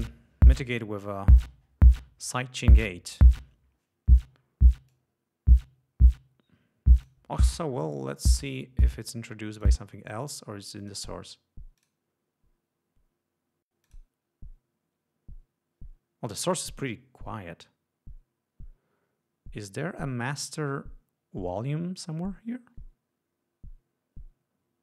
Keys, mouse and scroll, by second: 3.2 click, 5.0-7.4 drag, 8.2 right click, 9.7 click, 10.9 click, 11.9 click, 13.9 click.